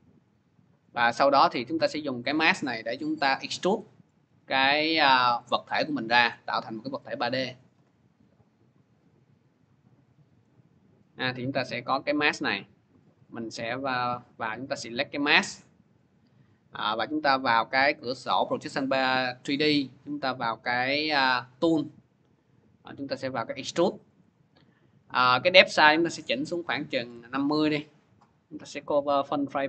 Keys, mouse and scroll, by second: 0.4 click, 1.2 click, 2.1 click, 3.3-4.0 click, 4.0 middle click, 4.9 click, 5.5 click, 6.1 click, 6.7 click, 7.9 click, 9.4 click, 10.3 middle click, 13.2 click, 14.6 click, 15.2 click, 17.3 click, 20.7 click, 21.2 click, 23.1 click, 25.5 click, 26.4-26.9 typing, 28.6 click, 29.3 click.